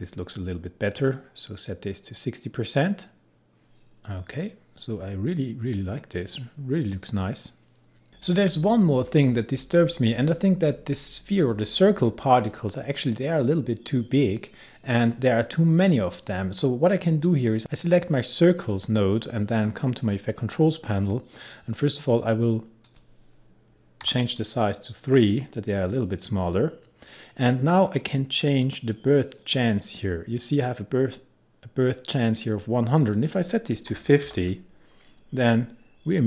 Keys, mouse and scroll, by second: 4.2-5.4 scroll up 1, 5.4-7.2 scroll down 1, 8.1 click, 17.6 click, 19.6-20.9 scroll down 1, 22.7 scroll up 1, 22.9 click, 24.1 3, 24.4 click, 27.6-29.7 scroll down 1, 33.0 click, 33.9-34.3 typing.